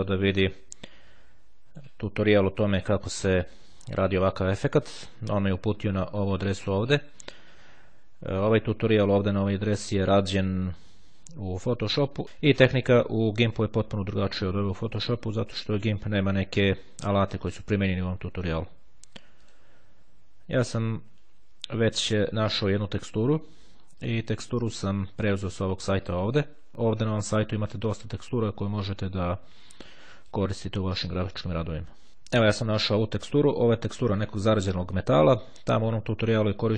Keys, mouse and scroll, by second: 0.9-2.5 drag, 2.9 click, 8.1-9.9 drag, 12.3 click, 14.9-18.7 drag, 19.5 click, 23.9-31.0 drag, 31.7 click, 33.7-34.4 ctrl+scroll up 1.